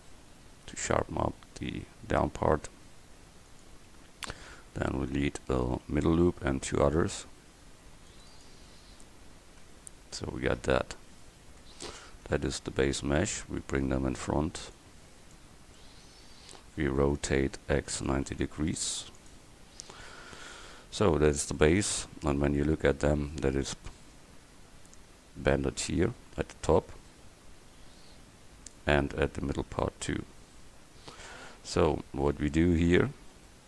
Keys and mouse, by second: 5.9 ctrl+r, 9.7 Tab, 10.7 click, 14.8 middle click, 15.9 middle click, 17.5 r, 26.7-28.3 middle drag, 28.5-31.1 middle drag, 31.6 middle click, 33.0 Tab.